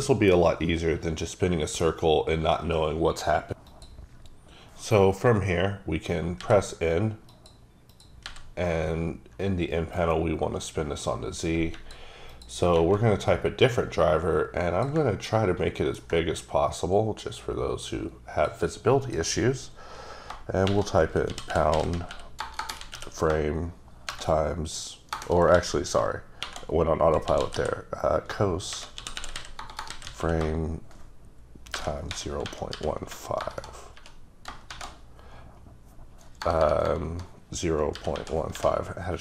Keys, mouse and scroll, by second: 8.1 click, 8.2 n, 10.0 click, 12.3 click, 13.7 click, 15.3 ctrl+middle click, 17.8 click, 19.1 click, 20.7-22.9 typing, 24.2-27.5 typing, 28.7-30.2 typing, 31.5-35.2 typing, 36.4-38.6 typing.